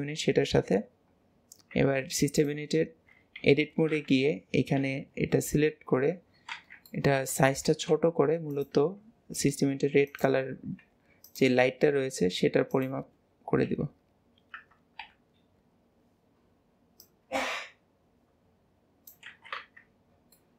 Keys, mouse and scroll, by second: 0.5 ctrl+j, 2.4 click, 4.9 KP_3, 5.8-6.6 scroll up 2, 6.6 alt+z, 7.0 shift+middle click, 7.8 s, 13.8 KP_7, 15.1 KP_Decimal, 17.1 click, 20.2 scroll down 5.